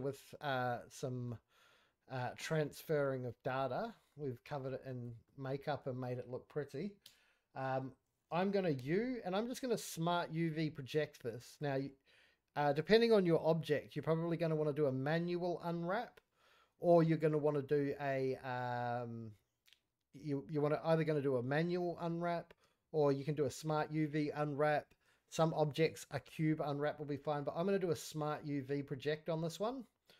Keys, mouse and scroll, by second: 0.0 middle click, 0.5-1.2 middle drag, 3.5-4.1 middle drag, 4.2 scroll down 2, 4.4 middle click, 4.7 scroll up 1, 4.8 click, 5.2 middle click, 7.0 Tab, 8.7 u.